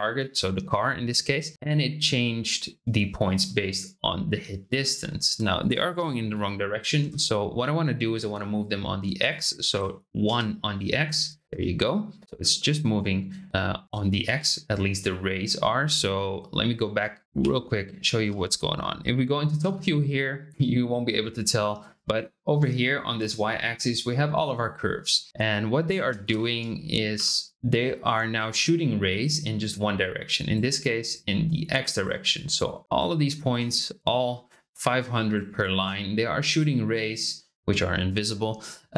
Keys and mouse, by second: 4.8 shift+click, 5.6-7.4 drag, 9.2-10.6 drag, 12.2-13.9 middle drag, 17.4 m, 19.5 KP_7, 26.0 shift+space, 29.9 click, 30.7 click, 31.7 click, 32.3 click, 32.8 click, 33.2 click, 35.1 click, 35.6 click, 36.4 click, 36.9 click.